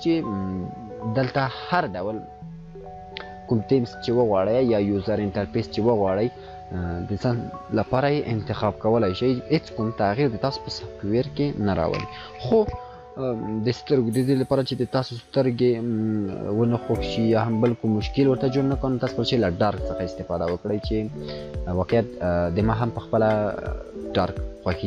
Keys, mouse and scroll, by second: 20.2-24.7 drag.